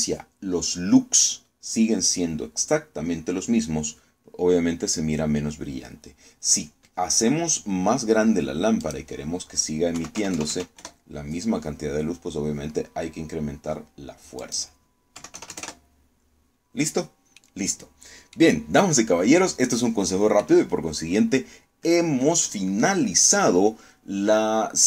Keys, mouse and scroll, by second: 9.5 click, 10.6 KP_1, 10.9 KP_0, 11.5 KP_Enter, 15.1 click, 15.8 KP_1, 16.0 KP_0, 16.2 KP_Enter, 18.0-19.2 middle drag, 19.3-19.6 scroll down 2, 20.1 click.